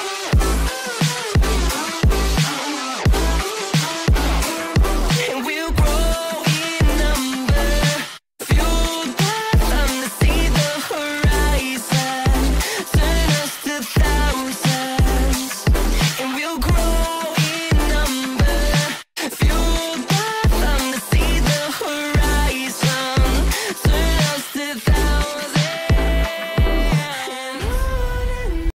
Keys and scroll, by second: 0.1 l, 3.1 shift+Page_Up, 4.6 shift+Page_Up, 5.2 ctrl+z, 6.1 shift+Page_Up, 6.5 Escape, 9.7 shift+Page_Up, 11.3 shift+Page_Up, 11.8 F4, 12.2 F3, 13.1 shift+F2, 13.7 F9, 15.3 Escape, 20.1 shift+Page_Up, 20.4 F3, 20.6 Escape.